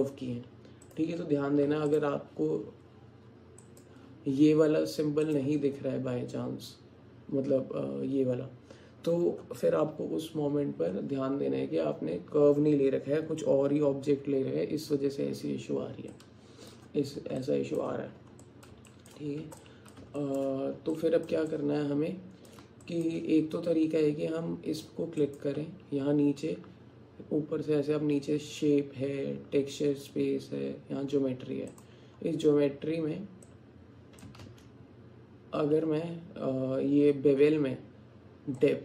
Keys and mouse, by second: 1.7 x, 3.7 click, 5.3 click, 16.3 alt+click, 17.4 click, 18.5 alt+click, 18.9 alt+shift+click, 19.7 alt+click, 20.2 alt+shift+click, 21.0 alt+click, 21.6 alt+shift+click, 22.3 alt+shift+middle click, 22.8 alt+click, 25.4 click, 31.8 click, 33.6 click, 34.5 ctrl+z, 38.6-38.8 drag.